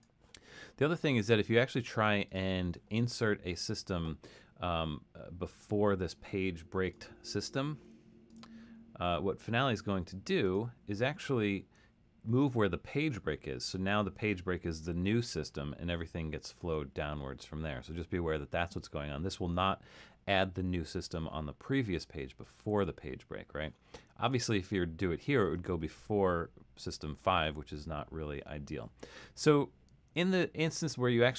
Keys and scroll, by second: 22.8 super+z.